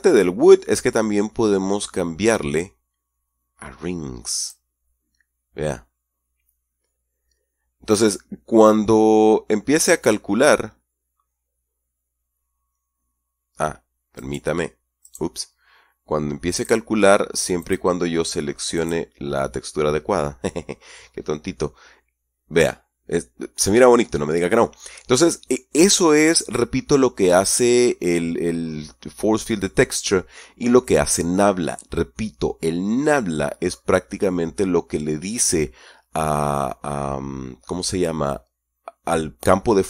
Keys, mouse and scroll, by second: 4.8 click, 14.5 right click, 15.4 right click, 16.9 click, 18.0 click, 19.1 click.